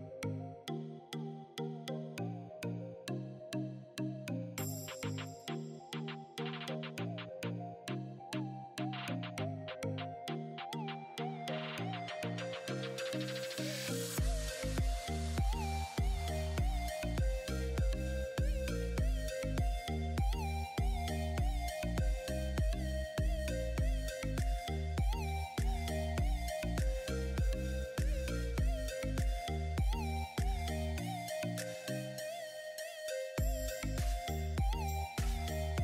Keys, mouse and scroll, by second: 2.7-6.9 drag, 11.7 click, 12.2-13.2 scroll up 1, 13.2-17.1 drag, 18.0 click, 22.8 click, 25.4-25.9 scroll down 1, 27.4-31.6 drag, 31.6 ctrl+g, 34.1 click, 34.9-35.8 alt+drag.